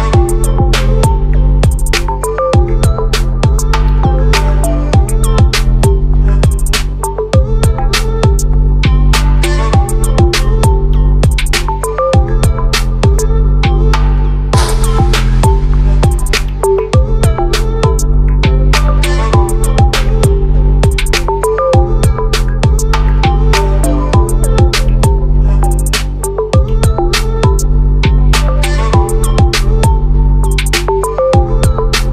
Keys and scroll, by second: 14.5 ctrl+z, 18.7 ctrl+t.